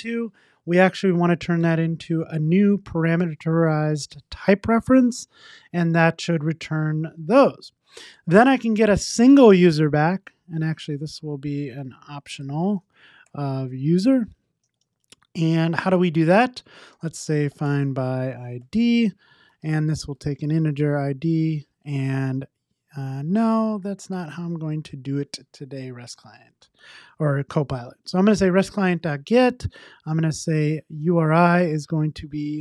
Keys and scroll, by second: 1.6 Tab, 5.9 super+s, 12.4 Return, 28.0 Return.